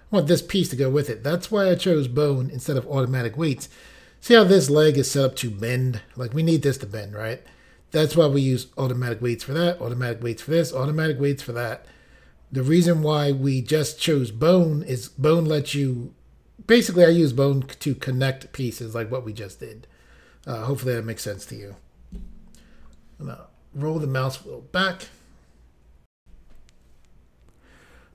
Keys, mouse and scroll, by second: 23.4-24.6 scroll down 1, 26.2 Insert, 27.3 Pause.